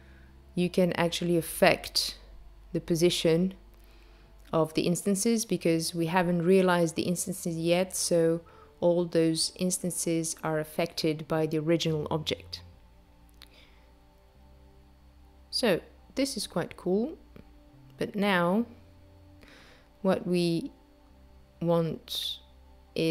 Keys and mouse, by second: 13.1 space, 19.0 space, 21.1 click.